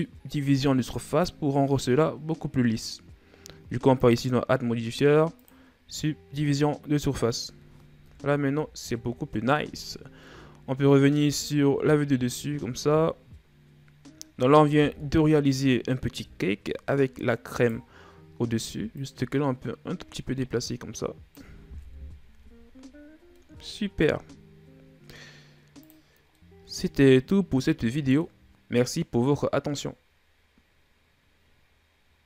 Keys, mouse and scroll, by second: 0.8 click, 3.7-6.2 drag, 6.2-7.8 middle drag, 7.8 KP_1, 8.3 a, 10.0 KP_7, 11.7-12.1 shift+scroll down 2, 12.1-13.0 scroll up 2, 13.3-14.7 middle drag, 14.7 KP_1, 15.9 KP_7, 17.3 right click, 18.7-21.6 drag, 21.6 KP_1, 22.1 a, 22.8-23.1 scroll down 4, 23.1-23.7 middle drag, 23.7-25.5 scroll up 4, 25.5 click, 26.2-28.3 middle drag, 28.3 scroll down 1, 28.5-30.1 middle drag.